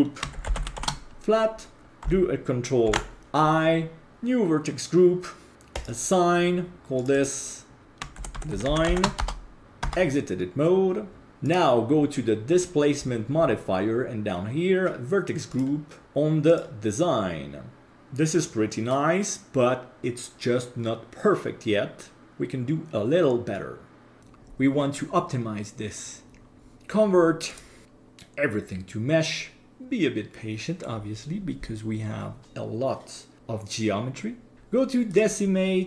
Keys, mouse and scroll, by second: 2.9 ctrl+i, 4.1-5.5 drag, 5.7-6.9 drag, 7.8-9.6 shift+drag, 11.4 click, 12.6-14.4 scroll down 5, 15.5-17.9 drag, 17.9-23.5 middle drag, 26.6-33.8 drag, 34.5-35.8 drag.